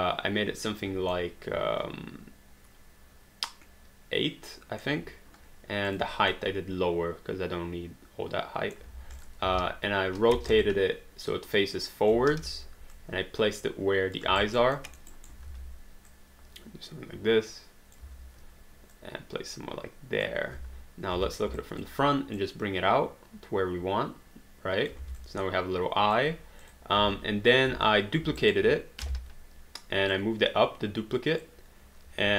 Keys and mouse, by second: 1.1 middle click, 5.9 click, 6.3 middle click, 9.2 click, 9.5 e, 10.6 click, 10.6 j, 12.1 j, 12.4 w, 12.9 click, 14.6 alt+right click, 14.8 alt+middle click, 15.1 alt+right click, 15.5 r, 16.1 click, 18.0 w, 19.0 click, 20.5 space, 21.6 alt+click, 25.0 alt+d, 25.3 alt+click, 26.6 click, 27.0 space, 28.4 alt+right click, 29.0 ctrl+d, 30.1 click, 32.1 r.